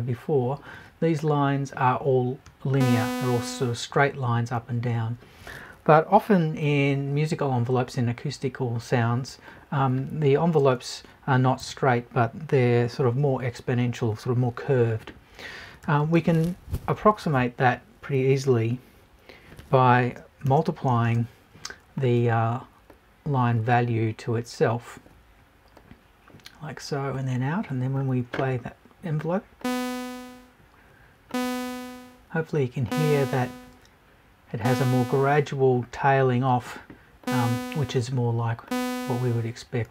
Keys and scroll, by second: 11.6 BackSpace.